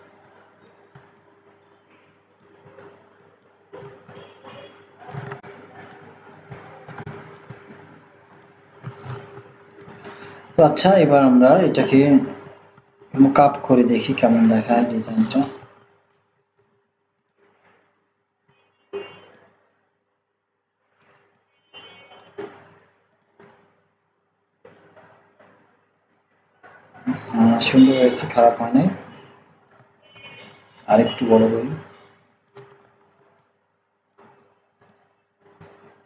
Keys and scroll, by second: 5.3 ctrl+z, 12.7 ctrl+x, 12.9 ctrl+z, 16.5 ctrl+v, 30.1 ctrl+t, 32.6 ctrl+z.